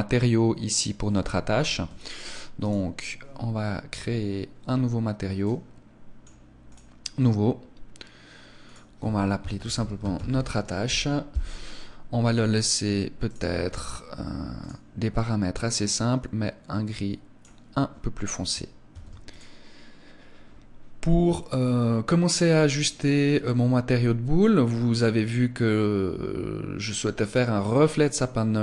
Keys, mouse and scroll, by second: 1.7 Escape, 2.7 right click, 5.3 click, 6.6 click, 8.6 click, 12.7-13.2 scroll down 2, 13.2 click, 14.5 click, 18.9 ctrl+s.